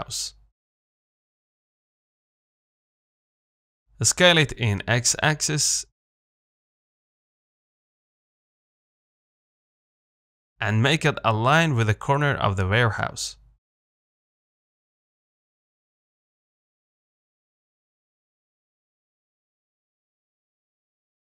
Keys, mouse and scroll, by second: 1.5 KP_Decimal, 2.1-2.4 scroll down 1, 2.4 middle click, 2.9-3.6 scroll up 2, 3.6 Tab, 3.9 a, 4.3 s, 9.0 s, 10.8 r, 13.0 g, 14.4-17.5 middle drag, 17.5 KP_7, 18.6 z, 19.7 g.